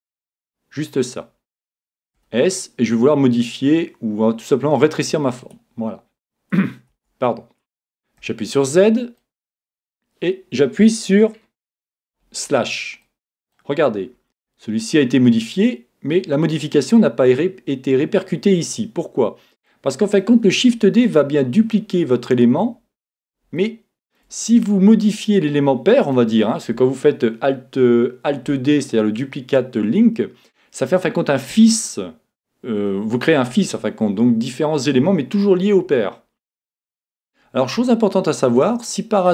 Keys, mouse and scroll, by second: 2.2 s, 5.5-7.2 drag, 6.9 Tab, 8.2 z, 8.8-11.8 middle drag, 11.4 KP_Divide, 13.0-21.7 middle drag, 23.0-26.9 middle drag, 37.9-39.3 middle drag.